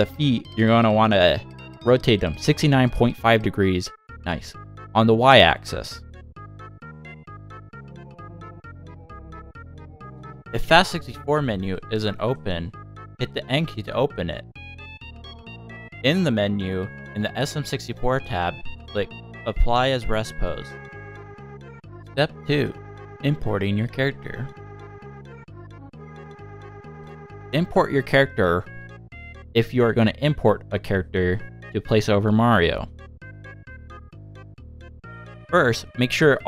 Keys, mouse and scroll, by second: 0.5 scroll up 1, 1.1 click, 1.7 click, 2.1 shift+click, 3.0 click, 4.0 shift+click, 4.6 scroll down 1, 4.9 r, 9.7 shift+middle click, 9.9 n, 11.4 click, 20.3 click, 21.0 middle click, 26.9 middle click, 27.6-28.0 scroll down 2, 28.4 click, 34.2-35.1 scroll down 5, 35.1 r.